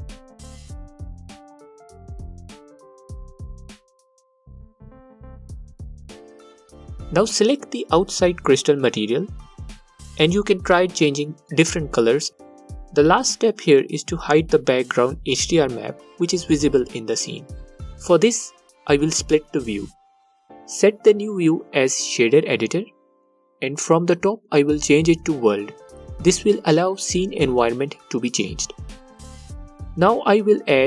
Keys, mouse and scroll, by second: 11.1-14.8 alt+drag, 17.7-30.8 drag.